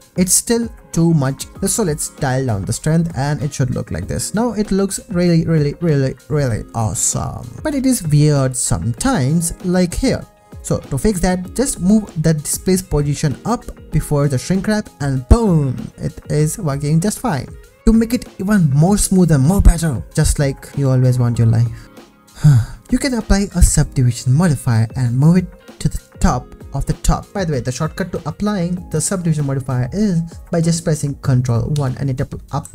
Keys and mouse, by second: 0.0 ctrl+s, 4.2-5.4 shift+middle drag, 6.3 ctrl+s, 7.6 g, 7.6 z, 12.1 click, 14.9 click, 16.0 g, 16.1 z, 27.9 click, 31.8 ctrl+1.